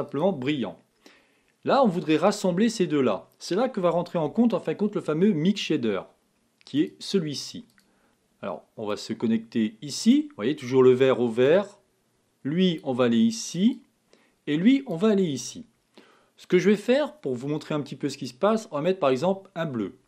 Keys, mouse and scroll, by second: 10.4-12.9 drag, 13.8 click, 18.3 click.